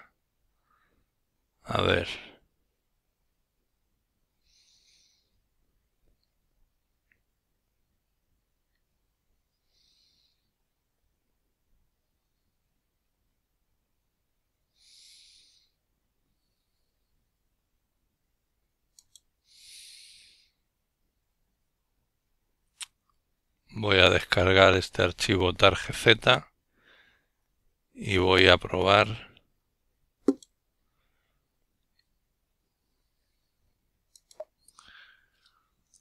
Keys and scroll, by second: 28.8-29.5 typing, 32.0 typing, 34.2-36.0 typing.